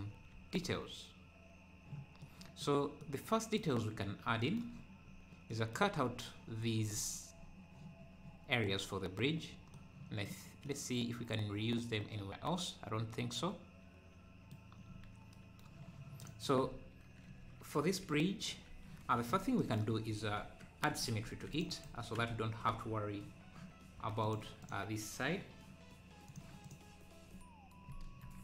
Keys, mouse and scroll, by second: 0.4 ctrl+s, 3.0 middle click, 5.1-5.5 scroll up 1, 5.5-9.4 middle drag, 9.4 scroll down 4, 9.7-15.4 middle drag, 16.2-17.3 drag, 17.3 KP_3, 17.6 KP_3, 17.8 KP_Decimal, 18.5-18.9 scroll down 2, 19.4 scroll up 4, 20.4 Tab, 21.3 ctrl+r, 24.3-25.6 drag.